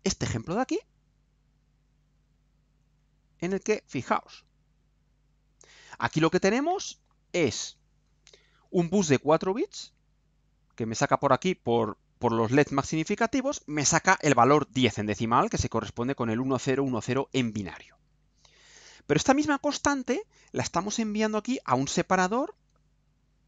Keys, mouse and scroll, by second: 4.4 click.